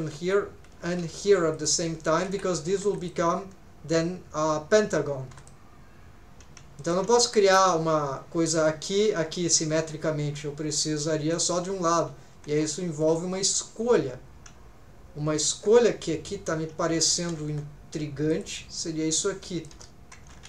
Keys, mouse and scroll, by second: 1.0 k, 2.8 2, 3.0 click, 5.3 3, 5.4 click, 6.8 shift+middle click, 11.3 right click, 11.3 click, 13.0 middle click, 15.8 scroll down 1, 16.8 alt+a, 17.5 k, 20.3 alt+a.